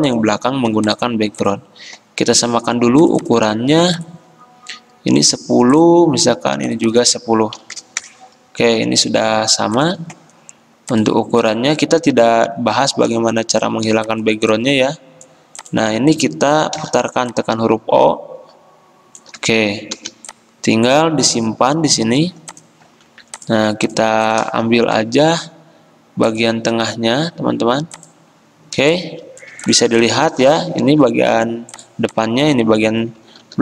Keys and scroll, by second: 7.6 typing, 8.0 Return, 11.8-12.5 typing, 16.8 o, 20.0 v, 30.9 ctrl+z, 33.5 ctrl+g.